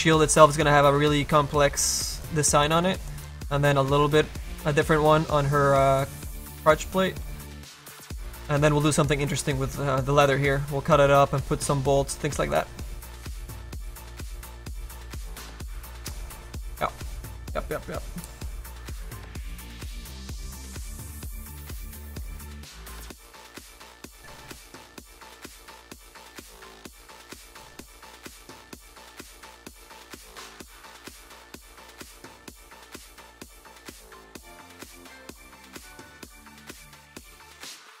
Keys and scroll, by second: 2.0 space, 5.4 space, 7.3 space, 12.5 space, 15.8 space.